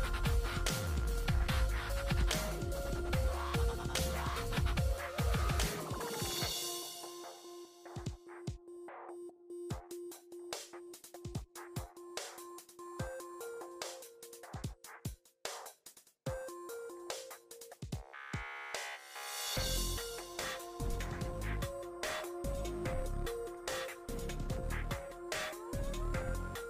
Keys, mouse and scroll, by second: 3.8 click, 4.0 typing, 5.2-8.1 middle drag, 9.7 click, 12.7 click, 19.3 5, 20.5 Tab, 20.7-21.8 typing, 21.9 Return, 24.1 click, 25.8 middle click.